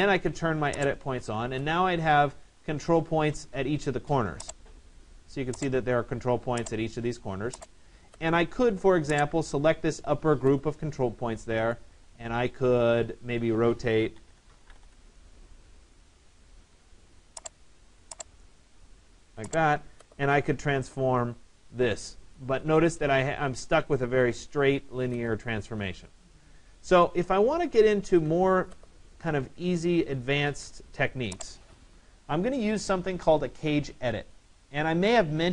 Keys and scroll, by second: 14.4 Return, 27.5 ctrl+z.